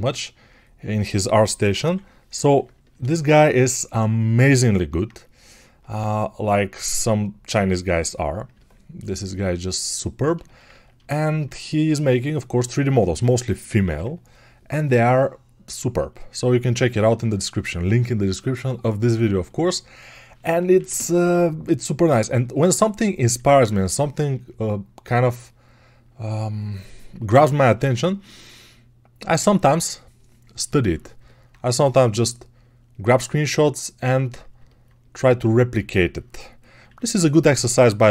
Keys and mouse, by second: 4.9-17.1 right drag, 16.2 alt+[, 17.1-21.7 alt+drag, 21.7-38.1 ctrl+right drag.